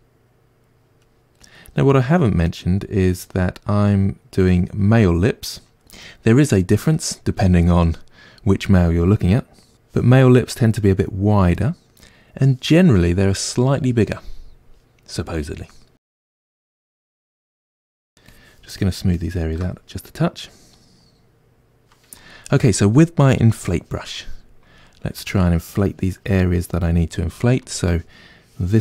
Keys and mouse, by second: 0.2-1.4 drag, 1.4 middle click, 1.9-5.0 drag, 5.0-10.8 middle drag, 10.8-16.1 drag, 16.1-17.8 middle drag, 17.8-19.6 shift+drag, 19.6-23.5 middle drag, 23.5-24.8 drag, 24.8-26.0 ctrl+middle drag, 26.0 click, 26.6-28.4 middle drag, 28.4-28.8 drag.